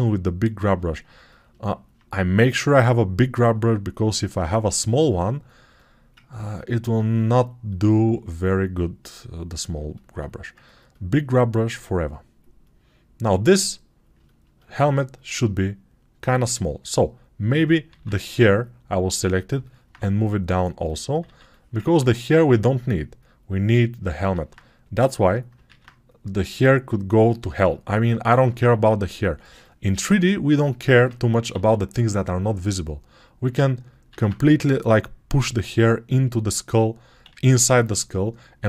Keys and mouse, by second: 6.8-9.6 right drag, 9.6 alt+click, 9.8 right click, 9.9 alt+click, 10.4 ctrl+alt+right click, 10.7 alt+click, 10.8 right click, 10.9 alt+click, 11.1-14.0 right drag, 14.0 ctrl+alt+click, 14.6-16.1 right drag, 16.1-38.6 alt+shift+drag, 17.8 alt+q, 21.1 alt+q, 24.2 alt+q, 25.6 alt+q, 31.4 alt+q, 34.0 alt+q, 37.2 alt+q.